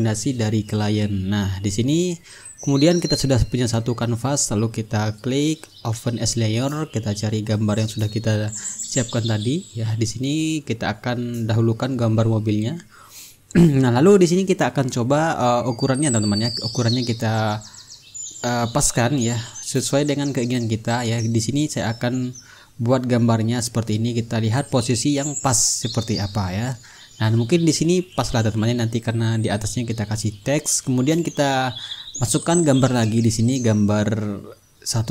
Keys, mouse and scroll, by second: 0.5 click, 1.7 click, 2.6-4.5 middle drag, 4.5 click, 5.8 click, 8.6 click, 11.6 click, 12.7 click, 14.4-17.1 drag, 18.1 click, 19.7-22.7 drag, 23.0-29.1 drag, 32.3 click, 34.2 click.